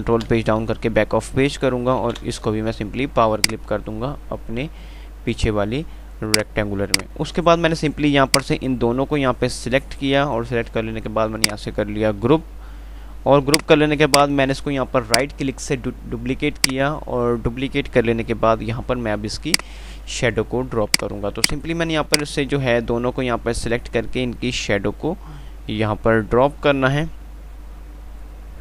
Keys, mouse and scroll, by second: 0.4 shift+Page_Down, 3.6 click, 6.5-11.4 drag, 12.1 F3, 13.8 click, 15.4 right click, 16.3 F2, 17.1 click, 17.4 F2, 19.7-28.6 drag.